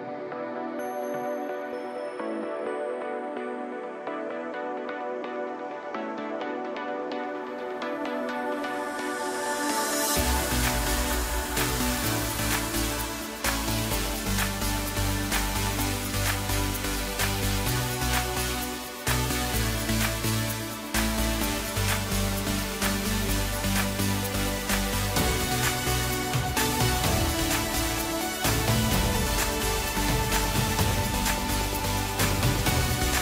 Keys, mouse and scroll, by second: 1.2 click, 1.9-2.3 scroll up 1, 2.3-2.7 scroll down 2, 2.7-5.7 middle drag, 7.4 KP_0, 10.0 click, 10.4-11.6 scroll down 7, 11.6-12.9 drag, 13.3-13.9 scroll down 3, 13.9-17.0 middle drag, 17.9 drag, 18.8 click, 20.4 click, 21.1-23.8 scroll down 5, 23.8-26.9 drag, 27.7 click, 28.3 scroll up 2, 28.6 scroll down 3, 28.9-31.9 middle drag, 33.0 KP_0.